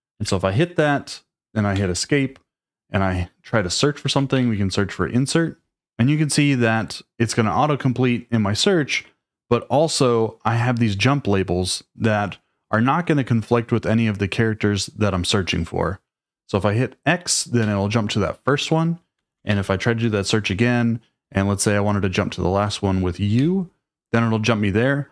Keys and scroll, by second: 0.1 ctrl+s, 1.7 Escape.